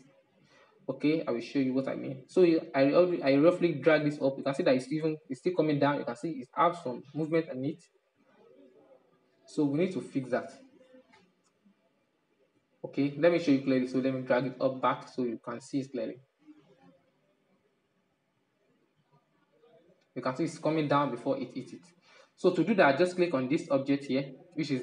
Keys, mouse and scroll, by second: 1.5-1.9 scroll up 4, 1.9-4.0 shift+middle drag, 4.0 Right, 4.2 Right, 4.5 Right, 4.6 Right, 5.3-5.7 Left, 6.7 Right, 7.0 Right, 7.4 Left, 7.6 Left, 8.7-10.4 middle drag, 10.4-10.9 scroll down 5, 10.9-12.4 middle drag, 12.4-12.9 drag, 12.9-14.1 middle drag, 14.1-19.9 drag, 20.8-21.4 drag, 21.4-24.8 middle drag.